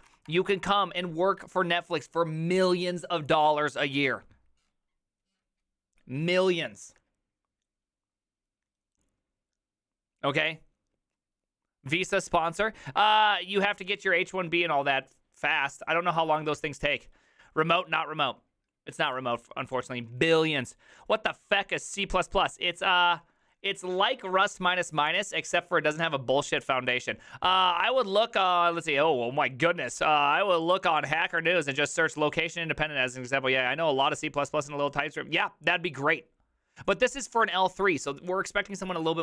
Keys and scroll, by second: 0.0-0.6 typing.